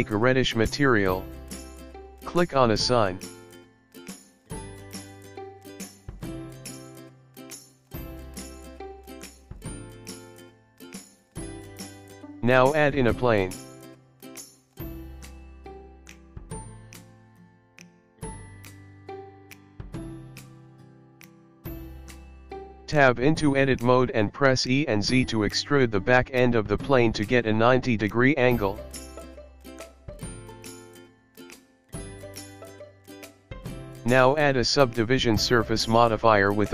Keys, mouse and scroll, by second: 2.9 click, 5.7-6.5 scroll down 6, 6.5-7.2 scroll down 4, 7.2-8.4 scroll up 1, 10.8 click.